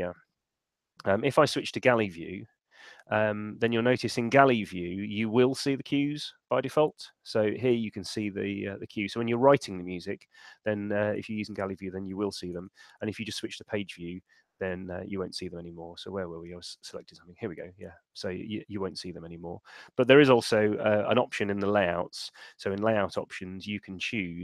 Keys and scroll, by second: 1.4 alt+super+2, 12.6 alt+super+1, 22.5 shift+super+l.